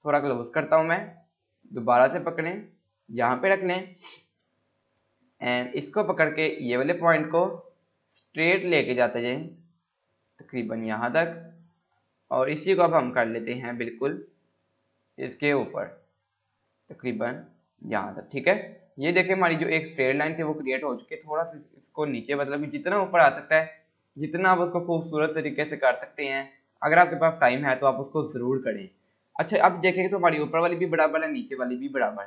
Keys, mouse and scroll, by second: 1.5-3.1 click, 3.4 scroll down 1, 5.6 click, 6.8 scroll up 1, 8.0 scroll down 1, 8.5-11.3 drag, 11.5 scroll up 1, 15.3-18.1 click, 18.4 scroll up 1, 19.2 scroll down 1, 19.9 scroll up 1, 21.9-22.5 click, 22.7 scroll down 1, 24.4 F4, 26.4 click, 27.9 Delete, 29.1 click, 32.1 scroll down 1.